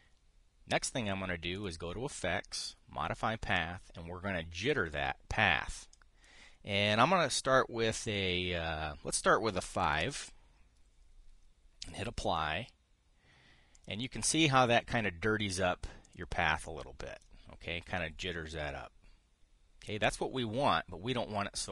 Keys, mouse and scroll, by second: 2.3 click, 5.3 click, 6.6 click, 10.2 KP_5, 12.5 click, 14.5 click, 16.7 click, 17.3 click.